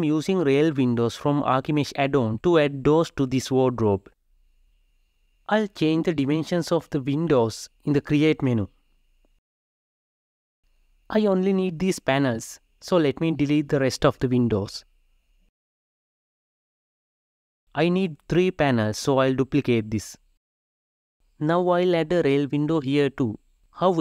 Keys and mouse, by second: 3.2 click, 4.0-5.5 drag, 5.6-7.2 drag, 7.7-9.0 drag, 9.2-10.5 drag, 10.7-11.9 drag, 12.6 Delete, 13.1 click, 13.3 Delete, 14.6 drag, 14.9 shift+click, 15.1 Tab, 15.4 r, 16.2 g, 17.6 shift+d, 23.8-24.0 drag.